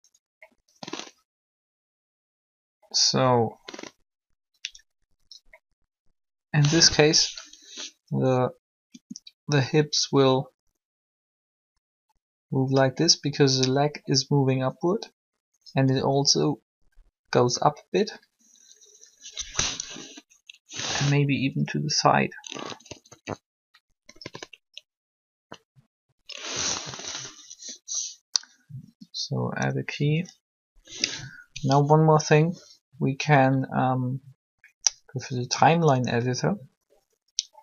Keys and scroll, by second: 8.9 r, 19.8 1, 28.8 i.